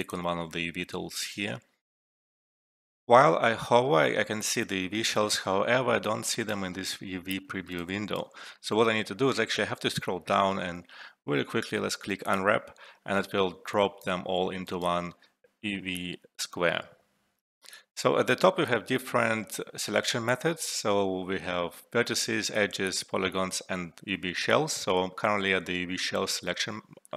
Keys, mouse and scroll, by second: 1.3 scroll down 1, 2.6 alt+F12, 6.0 alt+F12, 6.2 alt+right click, 7.4-8.6 alt+middle click, 8.1 alt+right click, 8.3 alt+middle click, 9.6 scroll down 1, 10.2-10.8 scroll down 2, 12.2 click, 13.6-14.5 alt+right click, 14.3 alt+middle click, 15.6 scroll up 1, 16.2 scroll up 1, 17.0 scroll up 1, 26.9 alt+middle click.